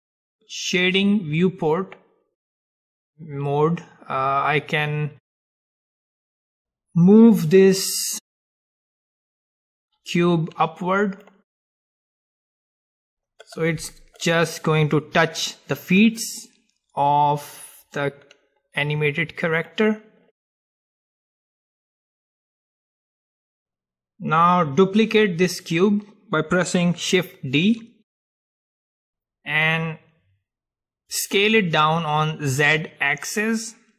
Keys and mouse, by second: 1.0-3.8 drag, 6.2-8.3 drag, 8.4-10.4 drag, 11.8-15.8 middle drag, 17.2-19.2 drag, 20.0-23.4 middle drag, 27.8 shift+d.